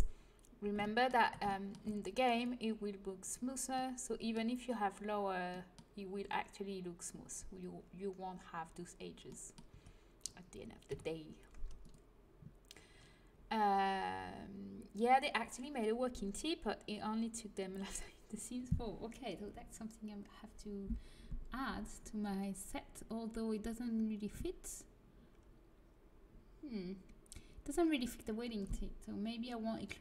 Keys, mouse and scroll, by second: 2.3-3.9 drag, 3.9-8.2 middle drag, 9.6 Tab, 10.8 Delete.